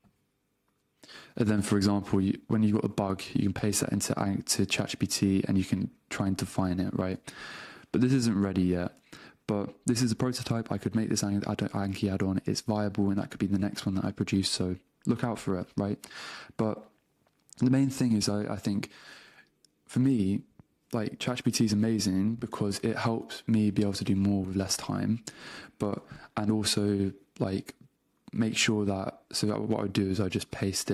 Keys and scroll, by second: 1.1 super+Tab, 5.4 super+Tab, 22.6 super+space, 23.9 Return, 24.6 super+q, 25.2 super+space, 25.8 Return, 28.4 super+Tab, 30.7 BackSpace.